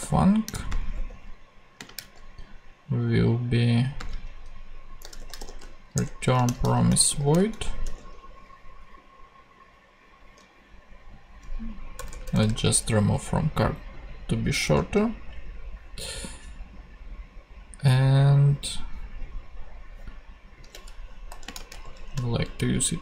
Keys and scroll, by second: 0.0-1.7 typing, 2.0 super+v, 3.9-7.6 typing, 7.8 super+;, 8.7 ;, 11.9 BackSpace, 21.3 shift+;, 21.4 shift+space, 22.1 alt+shift+super+v, 22.3 alt+shift+super+Left.